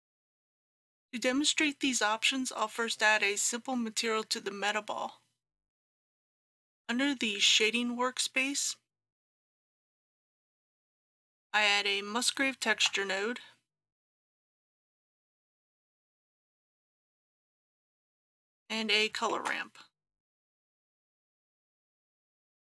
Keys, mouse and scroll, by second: 12.7 shift+a, 15.9 click, 19.4 shift+a, 21.7 click.